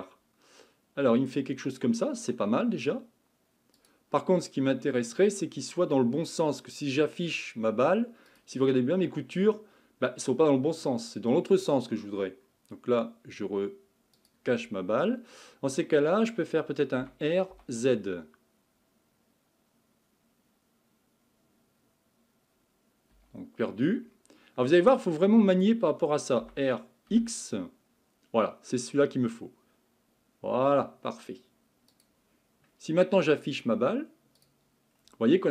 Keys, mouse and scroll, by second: 8.3 click, 8.9-9.4 scroll down 3, 9.4-12.5 scroll up 2, 14.2 click, 17.0 r, 24.0-24.7 scroll up 3, 24.7-26.4 scroll down 2, 26.4 r, 34.4 click, 34.9-35.3 scroll down 4.